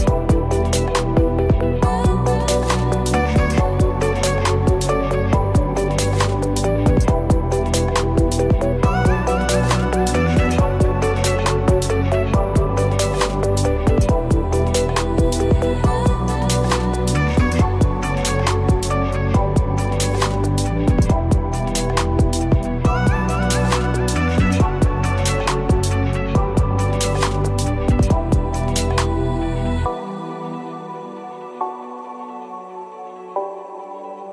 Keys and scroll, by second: 32.9 ctrl+d.